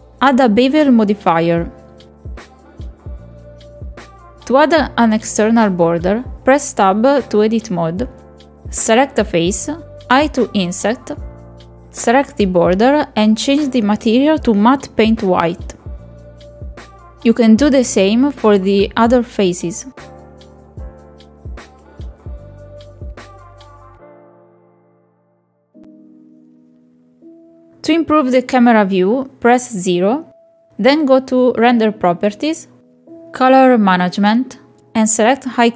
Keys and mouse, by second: 1.3 middle click, 1.7 KP_Decimal, 2.2 click, 2.6-3.6 drag, 4.3-5.8 drag, 5.4 KP_0, 6.4 click, 6.6 click, 7.5 middle click, 8.0 Tab, 9.0 3, 9.1 click, 12.7 middle click, 13.3 Tab, 13.7 middle click, 14.1 middle click, 15.3 click, 15.8 click, 16.0 Tab, 16.6 click, 17.3 middle click, 17.5 middle click, 18.1 middle click, 18.8 middle click, 19.7 click, 20.6 click, 21.5 click, 22.0 Tab, 23.0 click, 24.3 middle click, 24.5 shift+middle click, 25.5 shift+middle click, 26.0 Tab, 26.5 1, 27.0 middle click, 27.1 shift+middle click, 27.7 middle click, 27.8 shift+click, 28.2 click, 28.5 Tab, 28.7 middle click, 28.9 shift+middle click, 29.0 middle click, 29.3 KP_0, 30.0 click, 32.6 click, 33.8 click.